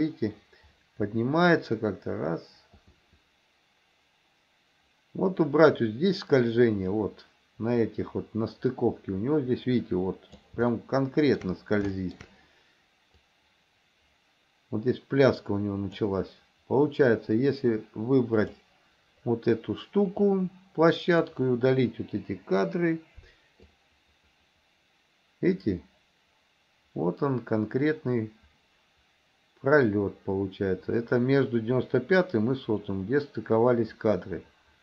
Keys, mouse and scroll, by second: 10.8 shift+middle click, 12.0 shift+middle click, 13.3-16.1 drag, 18.4 click, 20.2-21.3 drag, 22.4 Delete, 23.8-34.8 drag.